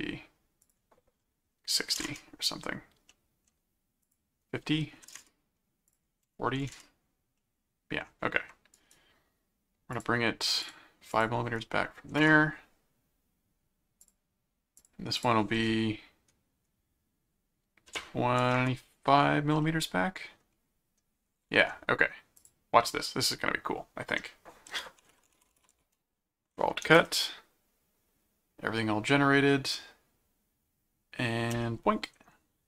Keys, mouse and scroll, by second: 0.6 click, 3.1 middle click, 4.1 click, 5.9 click, 7.4 middle click, 8.7 right click, 9.9 click, 10.6 click, 14.0 click, 14.8 click, 19.6 middle click, 22.4 click, 24.4-26.2 typing, 27.0 Return, 31.5 Return.